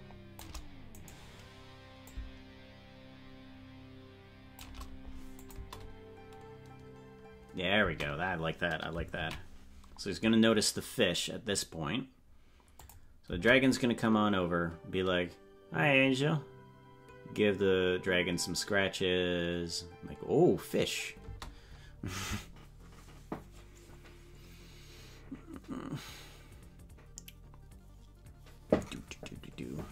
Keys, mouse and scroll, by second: 1.2 right click, 2.0-4.6 shift+drag, 5.5 click, 5.6 space, 8.9 space, 11.8 ctrl+s, 12.9 click, 13.3 space, 21.3 space.